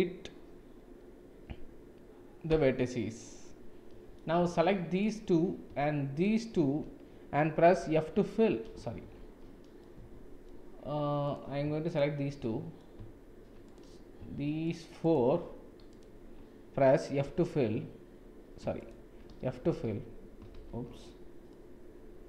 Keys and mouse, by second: 3.4 middle click, 5.1-6.6 alt+drag, 7.8 f, 9.0 ctrl+z, 9.8 middle click, 11.8 shift+click, 12.4 middle click, 13.6 click, 15.0 shift+click, 15.9 shift+click, 17.2 f, 19.2 f, 20.5 shift+z, 21.5-22.2 middle drag.